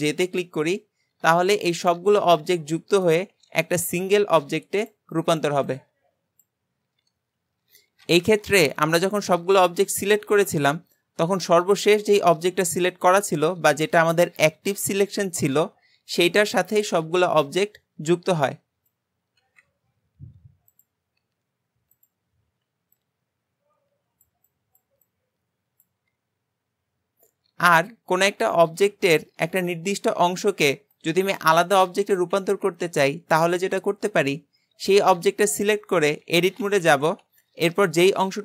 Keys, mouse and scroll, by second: 1.9 click, 2.1 click, 2.4 g, 8.9 ctrl+z, 9.4 ctrl+z, 20.7-27.0 drag, 36.5 alt+z.